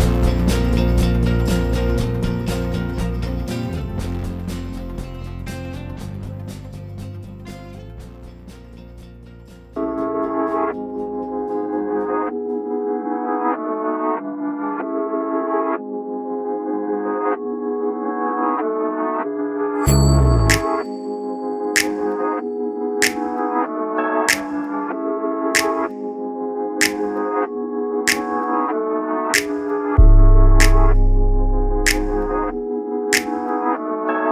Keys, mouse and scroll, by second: 9.9 shift+Delete, 11.1 scroll, 11.1-11.5 scroll up 1, 13.4 click, 14.8 scroll down 1, 15.5-34.3 drag.